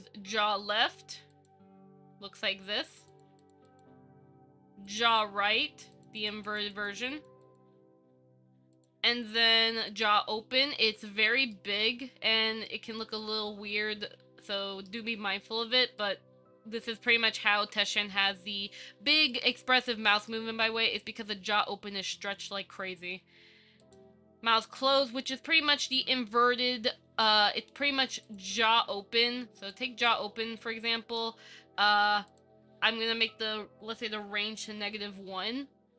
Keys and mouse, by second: 1.5 click, 3.1 click, 3.3 click, 3.6 click, 3.9 click, 6.1 click, 6.7 click, 7.3 click, 7.7-8.9 drag, 11.7 shift+middle drag, 12.0-12.9 middle drag, 13.4-15.1 middle drag, 16.2 middle click, 17.8 KP_1, 19.5-20.5 shift+middle drag, 28.4 click, 29.9 click, 32.5-35.0 drag.